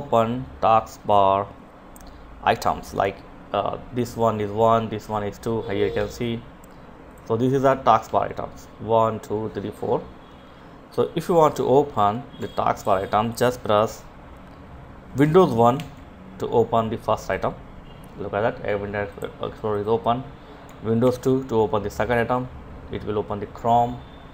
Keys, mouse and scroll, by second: 5.0 F5, 6.0 click, 7.0 F9, 11.1 F10, 11.8 click, 14.8 super+1, 18.2 click, 20.0 super+2.